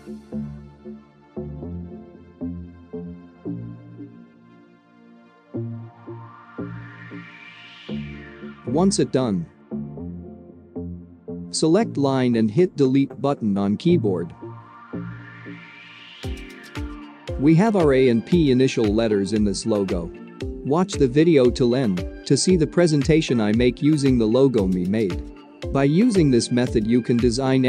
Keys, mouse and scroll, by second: 2.2-6.6 drag, 12.6 Delete, 15.5-16.0 scroll up 2, 16.0-16.3 drag, 16.6 click, 16.9-19.0 alt+scroll down 4, 19.0 click, 19.3 alt+shift+click, 20.1 click, 20.3 alt+scroll down 1, 21.3-22.6 drag.